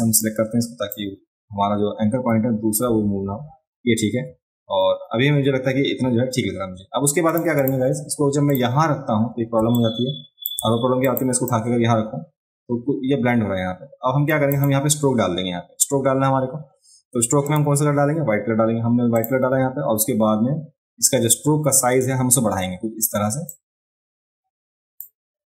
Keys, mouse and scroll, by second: 0.2 click, 7.3 click, 7.6 click, 8.5 click, 9.6 space, 9.8 click, 11.0 click, 11.5-14.3 drag, 14.5 click, 17.5 click, 19.1 click, 23.5 click.